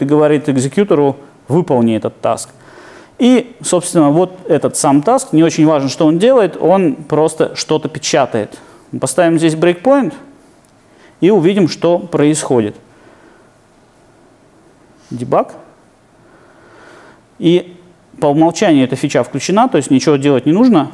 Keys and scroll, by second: 9.4 super+F8.